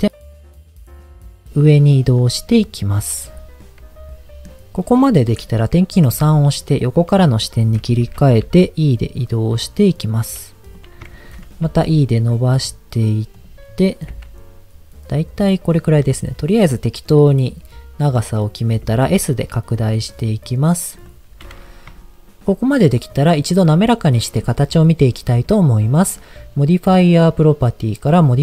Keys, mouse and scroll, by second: 0.3 g, 0.5 z, 2.0 click, 2.3-4.5 middle drag, 6.1 KP_3, 7.4 shift+middle click, 8.4 e, 10.7 click, 11.1 shift+middle click, 11.6 e, 13.3 click, 13.5-14.1 scroll down 1, 14.1 g, 15.4 click, 17.0-18.2 middle drag, 18.8 s, 20.9 click, 22.0 shift+middle click.